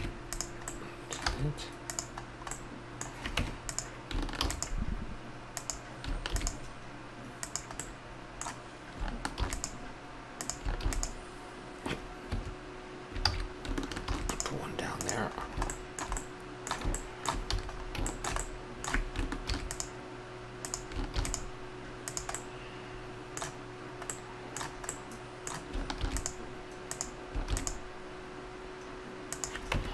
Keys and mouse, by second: 0.7-1.0 middle drag, 1.2 z, 2.5 middle drag, 2.7 middle click, 3.3 Tab, 4.4 ctrl+r, 6.2 ctrl+r, 9.3 ctrl+r, 10.8 ctrl+r, 13.2 ctrl+z, 14.2 ctrl+r, 17.5 a, 17.8 middle click, 19.5 ctrl+r, 21.0 ctrl+r, 26.0 ctrl+r, 27.5 ctrl+r, 29.7 Tab.